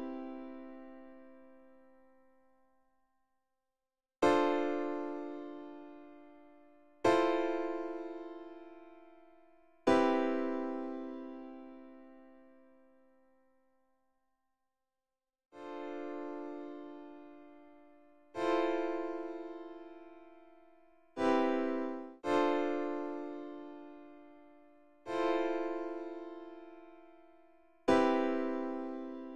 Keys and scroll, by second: 2.5 F1, 21.9 space.